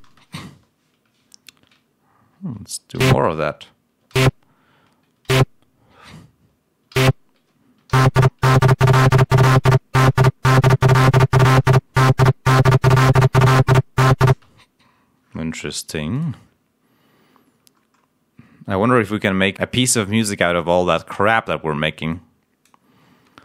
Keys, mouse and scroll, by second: 0.0 space, 2.9 ctrl+v, 5.2 ctrl+v, 6.8 ctrl+v, 7.8 l, 9.5 ctrl+scroll down 1, 10.7 ctrl+scroll up 2, 11.1 ctrl+scroll down 2, 14.2 space, 16.1 click, 17.7 scroll up 1, 22.0 click, 23.2 scroll down 2.